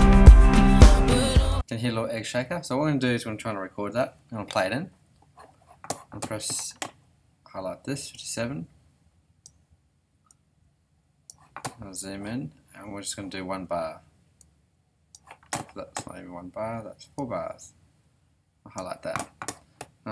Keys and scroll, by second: 1.5 space, 4.0 ,, 4.4 ..